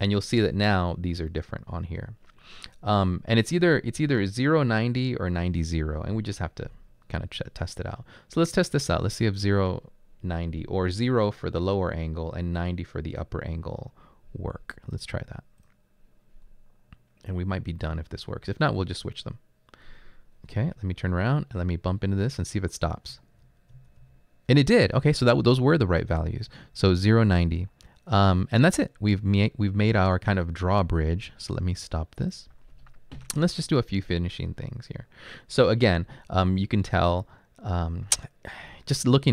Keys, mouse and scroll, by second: 4.5 typing, 20.6 Right, 21.1 Right, 21.7 typing, 23.1 Up, 23.7 Up, 24.0 Up, 24.8 Right, 25.3 Right, 27.1 Right, 28.4 Right, 29.0 Right.